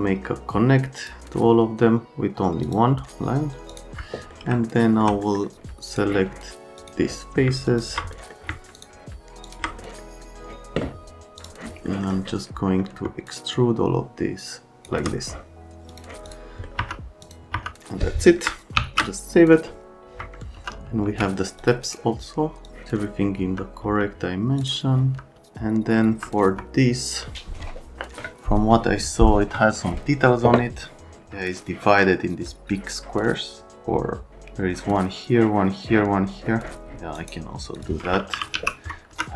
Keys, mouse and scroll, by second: 1.0 click, 2.6 click, 3.7 click, 4.3 middle click, 4.7 alt+middle click, 5.2 middle click, 5.9 click, 6.8 click, 7.7 ctrl+click, 8.1 middle click, 8.7 ctrl+click, 9.4 ctrl+click, 9.8 right click, 11.4 middle click, 11.9 middle click, 13.5 shift+click, 15.9 click, 16.3 click, 16.6 right click, 16.8 F3, 17.5 F3, 18.1 right click, 18.8 ctrl+s, 20.6 F3, 21.0 c, 21.6 click, 21.8 right click, 22.7 click, 23.4 F3, 23.8 F3, 24.6 click, 25.0 F3, 25.3 F3, 26.0 F3, 37.2 right click, 37.8 click, 38.1-39.1 typing, 39.1 F3.